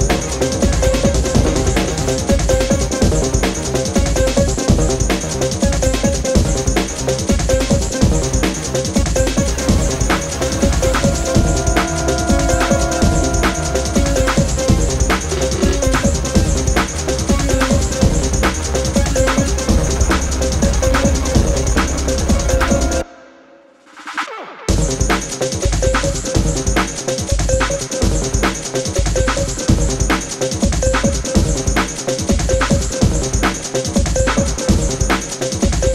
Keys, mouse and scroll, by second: 0.2 click, 0.7-1.8 alt+drag, 2.0 alt+scroll up 1, 2.5 alt+Tab, 3.1 click, 3.1 click, 4.0 ctrl+a, 4.7-8.0 typing, 8.4 ctrl+shift+,, 11.7-12.4 drag, 17.3-17.6 scroll up 2, 18.0-19.9 drag, 19.9 alt+scroll down 1, 20.4 click, 20.7-21.0 alt+scroll down 1, 21.0 click, 21.4 alt+scroll up 1, 22.9 click, 24.2 click, 24.6 alt+scroll up 1, 24.9 click, 25.8-29.1 typing, 29.8 click, 33.4 ctrl+a, 34.0 ctrl+shift+,, 35.7-35.9 drag.